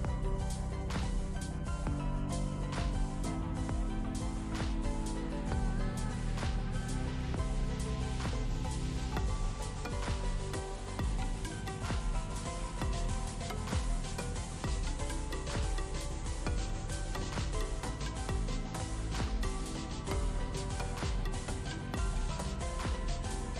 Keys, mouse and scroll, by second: 0.2 ctrl+space, 0.6-1.2 drag, 4.4 click, 6.2 click, 7.8-12.2 drag, 12.6 space, 12.7 click, 12.9 space, 13.2 click, 13.8 click, 14.4 click, 14.9-16.6 alt+drag, 17.3 ctrl+space, 17.4 ctrl+click, 17.6-18.2 ctrl+space, 19.0-19.6 drag, 22.0 space, 22.1-22.7 ctrl+click, 22.9-23.5 space.